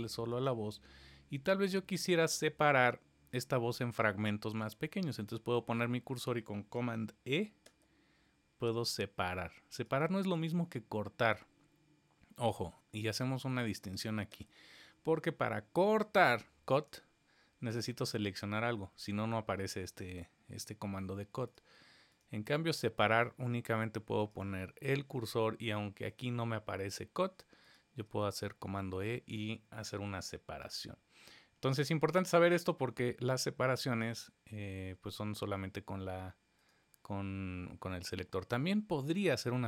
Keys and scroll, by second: 7.6 super+e, 10.2 super+e, 14.3 super+e, 28.2 super+e.